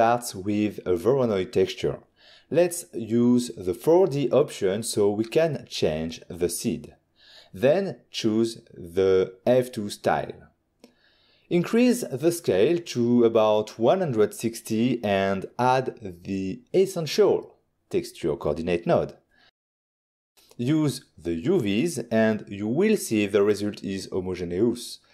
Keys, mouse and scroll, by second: 0.0-0.6 typing, 1.0 Return, 1.8 click, 3.3 ctrl+shift+click, 4.6 ctrl+middle click, 5.7 click, 6.3 click, 7.0 click, 7.8 click, 8.6 middle click, 8.9 middle click, 10.1 click, 11.6 click, 13.8 ctrl+middle click, 16.3 click, 16.6-19.8 typing, 16.9 click, 20.0 Return, 21.3 click, 21.8 click, 22.4 click.